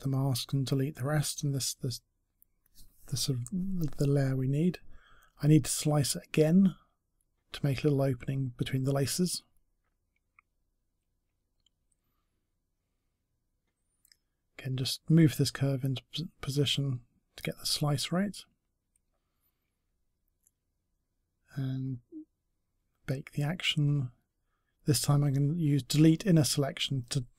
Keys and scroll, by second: 1.5 Delete.